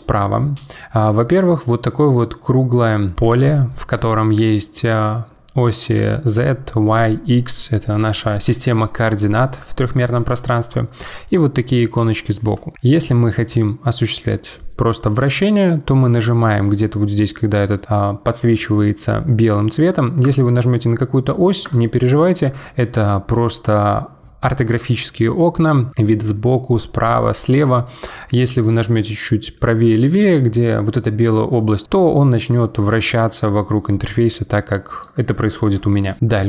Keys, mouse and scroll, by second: 13.3 click, 20.2 click, 21.6 click, 22.5 click, 27.6 click, 29.5 click, 32.2 click.